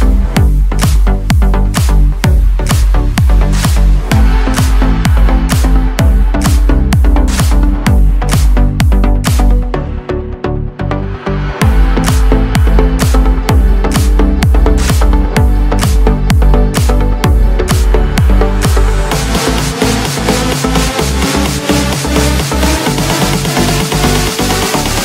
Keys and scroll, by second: 7.6 ctrl+e, 10.3 ctrl+shift+a, 22.2 ctrl+shift+i.